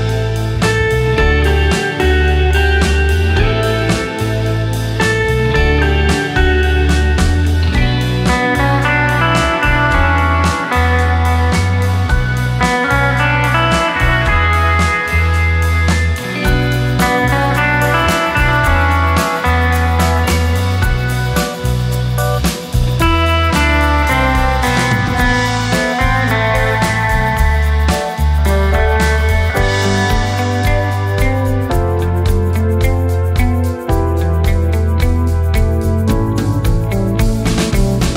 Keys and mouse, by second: 1.7 space, 4.7 space, 6.4 click, 7.2-7.7 middle drag, 7.7 click, 9.1 shift+a, 10.7 shift+a, 12.9-15.5 middle drag, 17.0 g, 17.3 middle click, 19.7-21.0 middle drag, 29.2-29.8 drag, 31.7-32.0 shift+drag, 32.9-34.3 middle drag, 35.2 Tab.